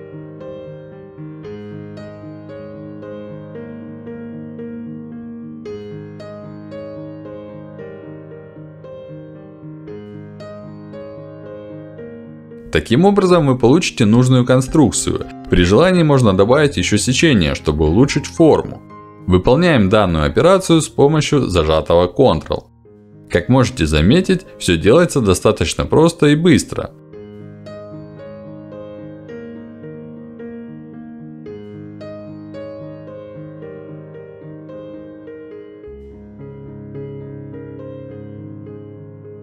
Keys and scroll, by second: 2.5 f, 5.4 f, 15.3 f, 16.2 f, 19.0 f, 21.8 f, 22.5 alt+f, 25.6 f, 26.5 f, 26.9 f, 27.4 alt+f, 29.7 f, 30.1 f, 31.9 f, 34.2 f.